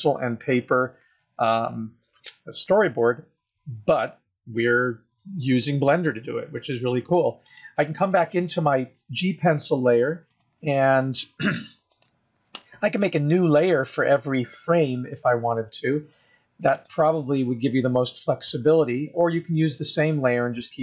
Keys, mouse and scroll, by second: 4.9 scroll down 2, 7.7 click, 10.5 click, 12.1 click, 17.0 click.